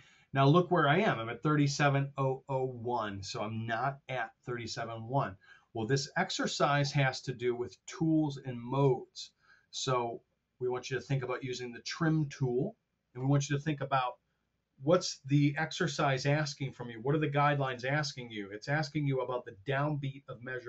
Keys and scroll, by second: 4.1 r, 5.9 super+Tab.